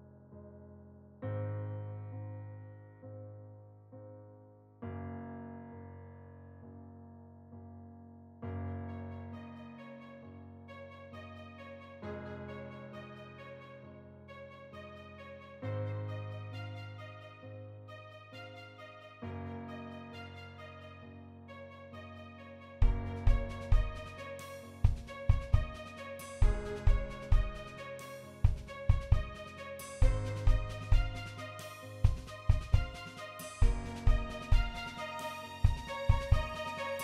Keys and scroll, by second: 0.3 shift+e, 1.5 e, 2.4 e, 3.5 e, 4.5 shift+e, 5.0 e, 6.2 e, 6.9 e, 7.5 shift+e, 8.0 shift+e, 11.0 e, 14.5-16.9 typing, 18.4 e, 19.7-21.3 typing, 22.9 shift+f, 24.2 shift+f, 28.2 a, 30.4 shift+e, 31.2 e, 32.9 e, 34.0 e, 34.7 e, 36.3 shift+e.